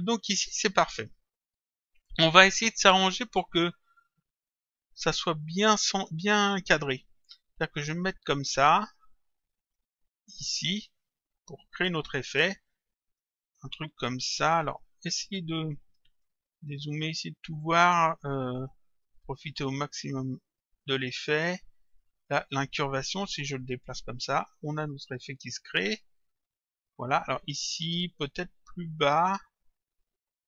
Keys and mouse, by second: 0.6 click, 7.2 click, 8.7 click, 10.3 click, 15.3 click, 16.7 click, 19.5 click, 21.9 click, 23.6 click, 28.4 click.